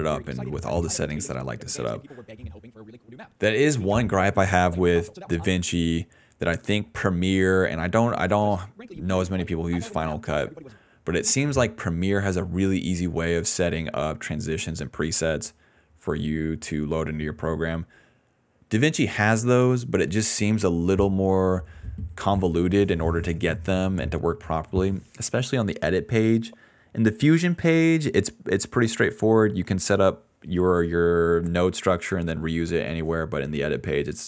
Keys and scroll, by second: 5.4 space, 8.2 space, 8.9 d, 10.7 space, 11.7 s, 15.5 ctrl+c, 16.3 alt+v, 21.4 ctrl+c, 21.8 alt+v, 23.3 ctrl+c, 23.6 alt+v, 31.3 ctrl+z.